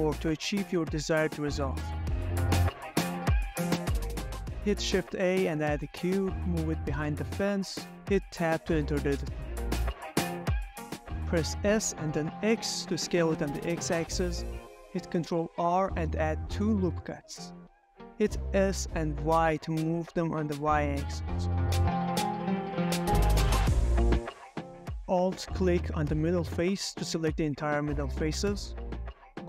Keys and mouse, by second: 0.4 ctrl+middle click, 0.7 s, 0.9 x, 1.8 Escape, 1.9 s, 2.3 x, 3.5 2, 3.8 middle click, 4.3 shift+a, 5.8 s, 7.6 click, 8.1 middle click, 8.3-9.8 typing, 8.6 middle click, 8.9 middle click, 9.3 middle drag, 9.6 middle drag, 9.8 Escape, 10.1 Tab, 10.8 middle click, 11.5 s, 11.7 x, 13.1 middle click, 13.8 s, 13.9 y, 15.2 middle click, 15.6 s, 15.7 y, 15.9 Escape, 15.9 middle click, 16.0 g, 16.6 Tab, 16.7 click, 17.1 Tab, 17.9 ctrl+r, 19.4 x, 19.9 s, 20.2 x, 20.7 y, 24.3 click, 25.8 3, 26.5 middle click, 27.6 alt+click, 28.0-29.4 middle drag.